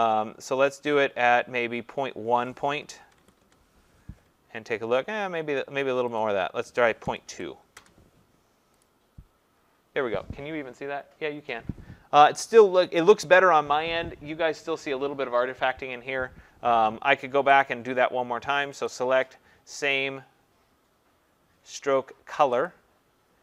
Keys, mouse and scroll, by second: 2.7-3.5 typing, 6.2 click, 7.1-7.8 typing, 8.8 click, 17.6 click, 18.8 click, 22.7 click.